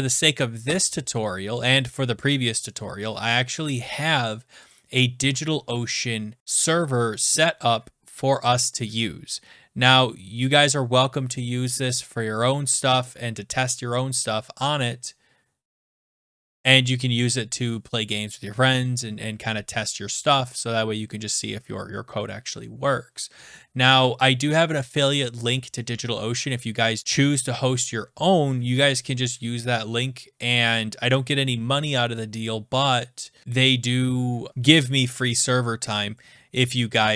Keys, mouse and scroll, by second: 4.7 click.